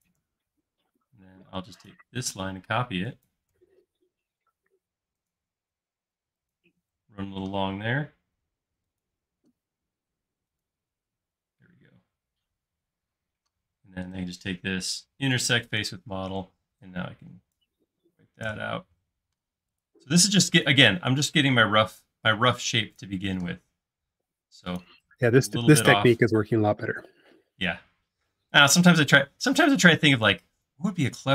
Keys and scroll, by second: 0.8 ctrl+shift+space, 2.4 m, 5.6 l, 11.2 space, 18.5 BackSpace, 19.4 e, 26.3 l.